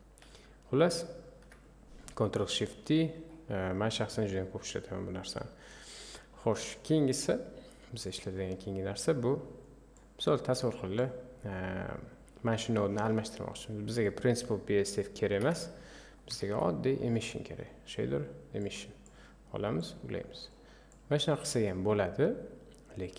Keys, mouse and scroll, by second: 0.4 Delete, 1.0 click, 1.4 Delete, 8.4 click, 10.0-14.1 drag, 15.5 Delete, 18.7 shift+a, 20.5 click.